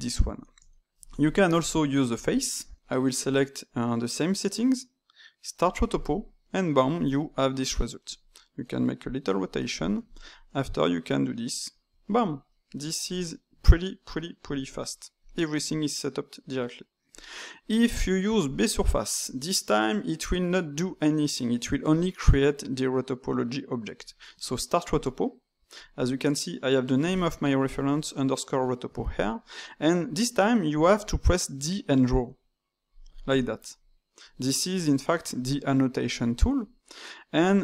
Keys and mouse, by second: 0.0-1.5 middle drag, 1.5-2.8 drag, 2.8-5.6 middle drag, 5.6-7.0 drag, 7.2 s, 9.8 click, 10.0 shift+click, 10.2 middle click, 10.8 ctrl+right click, 11.2 ctrl+right click, 11.6 ctrl+right click, 12.4-13.4 middle drag, 13.4 Tab, 15.2 click, 17.1-20.0 drag, 24.9-28.0 drag, 32.0 d, 32.3 click, 32.9 d, 33.7 click, 34.2 d, 34.8 click, 35.4 d, 36.0 click, 36.3 d, 36.8-37.6 middle drag.